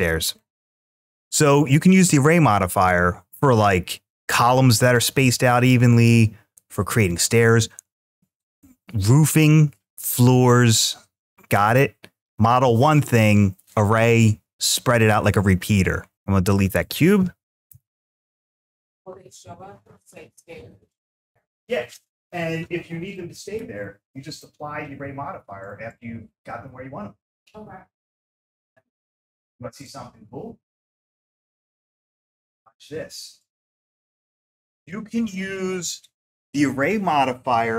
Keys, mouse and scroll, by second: 16.1-16.6 scroll down 5, 16.6 click, 17.5 x.